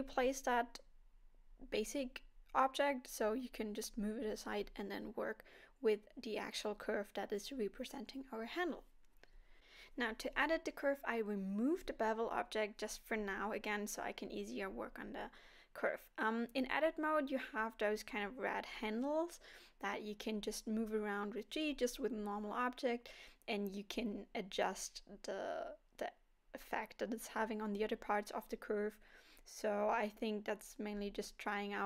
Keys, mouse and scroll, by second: 0.7 g, 2.3 alt+a, 2.7 middle click, 3.7 scroll up 2, 4.5 middle click, 6.4 click, 7.1 middle click, 7.8-8.4 scroll up 2, 8.5 shift+middle click, 9.9 click, 10.3-10.8 scroll up 1, 11.3 KP_1, 12.5 Tab, 13.8 click, 15.3 g, 19.0 click, 19.6 click, 20.4 g, 22.5 click, 22.9 g, 25.6 click, 26.6 e, 28.5 click, 29.3 g, 30.5 click, 30.6 g, 31.4 click, 31.5 g.